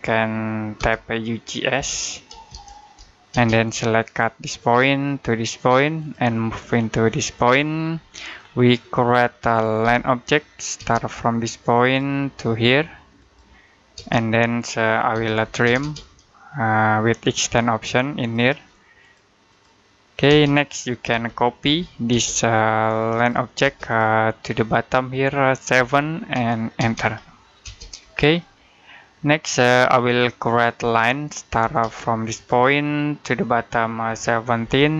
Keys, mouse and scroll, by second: 0.6-3.1 typing, 4.5 click, 7.8 middle click, 9.6 l, 10.6 space, 11.7 click, 13.8-15.6 typing, 18.1 shift+click, 18.8 click, 20.1-21.9 typing, 23.0 click, 23.5 space, 23.7 click, 25.6 7, 26.6 space, 27.9 scroll down 1, 28.2 middle click, 29.0-29.6 scroll up 1, 29.6 middle click, 30.6 l, 31.5 space, 32.2 click, 33.9 1.